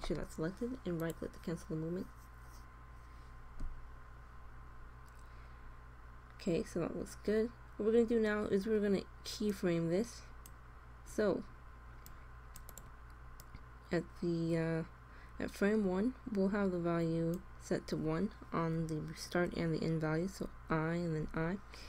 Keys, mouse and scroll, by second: 3.6-7.2 middle drag, 7.2 click, 7.8 middle click, 9.4-11.1 drag, 12.0-15.1 drag, 20.3 i, 21.2 i.